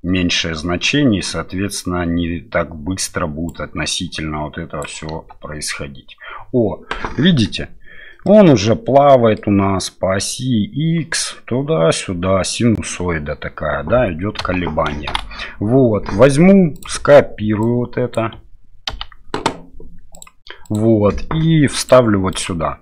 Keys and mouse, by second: 3.5-4.9 drag, 5.1 space, 8.3-9.4 middle drag, 14.4 space, 15.1 shift+Left, 16.8-20.3 drag, 20.6-21.9 drag, 22.4-22.8 drag.